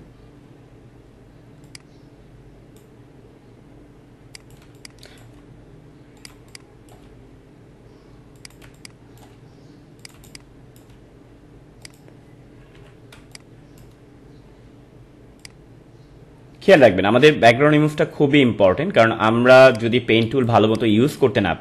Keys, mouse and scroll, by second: 4.6 space, 4.7 click, 5.3 space, 6.1 click, 6.3 space, 6.4 click, 6.8 space, 8.3 click, 8.6 space, 8.7 click, 9.1 space, 10.0 click, 10.1 space, 10.2 click, 10.6 space, 11.8 click, 12.7 ctrl+-, 13.1 space, 13.3 click, 13.6 space, 15.4-19.3 drag, 19.7 click, 20.5 space, 20.7 click.